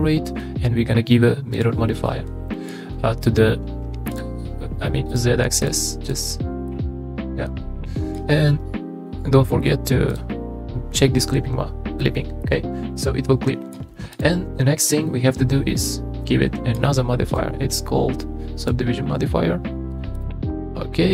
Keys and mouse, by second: 2.1-2.7 middle drag, 4.1 click, 5.1 click, 5.6 drag, 6.0 click, 6.7-8.1 middle drag, 10.1 click, 12.4-13.7 middle drag, 14.1 click, 16.2-16.7 middle drag, 17.3 click.